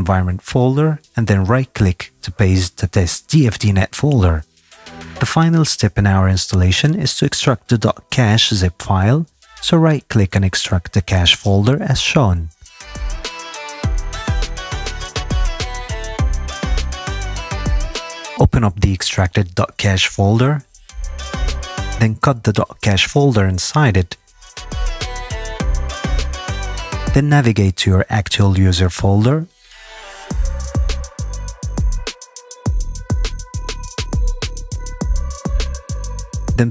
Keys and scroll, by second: 31.4 u.